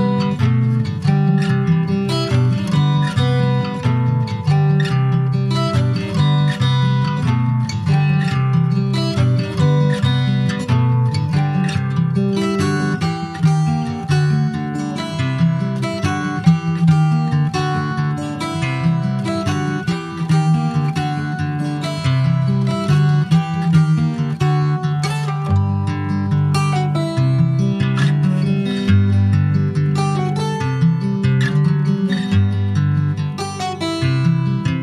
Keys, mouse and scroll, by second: 4.0 scroll up 1, 4.3 middle click, 4.7-5.0 scroll up 1, 5.0 ctrl+s, 5.2 click, 6.8-8.9 drag, 8.9-9.5 scroll down 10, 9.7 shift+middle click, 10.5-10.9 shift+scroll up 2, 11.0 click, 11.5 middle click, 11.8 scroll up 2, 12.1 shift+middle click, 12.4-13.0 shift+scroll up 6, 13.0-14.9 middle drag, 14.9-19.4 drag, 19.7-20.0 scroll down 4, 20.0 middle click, 20.3 click, 20.6 scroll down 1, 20.8 shift+middle click, 21.7 scroll down 2, 21.9-23.3 shift+middle drag, 23.3 scroll up 2, 23.8 ctrl+s, 24.0-26.5 middle drag, 26.5 ctrl+s, 27.5 click, 27.9 Tab, 28.1 click, 29.2 middle click, 30.0-30.6 shift+scroll up 1, 30.6 ctrl+click, 31.1-32.7 middle drag, 32.7 shift+click, 33.1 middle click, 34.0 shift+click, 34.3 middle click, 34.6-34.8 scroll up 4.